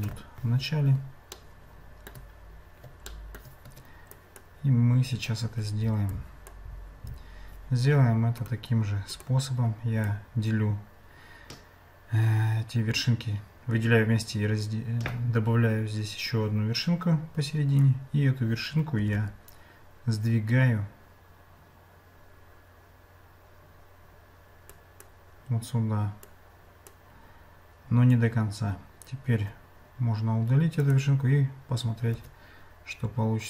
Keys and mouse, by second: 1.4 shift+middle click, 3.1 shift+middle click, 3.7 Tab, 4.2 click, 6.2 click, 8.4 right click, 10.1-17.8 drag, 19.0 g, 26.4 click, 32.1 Tab.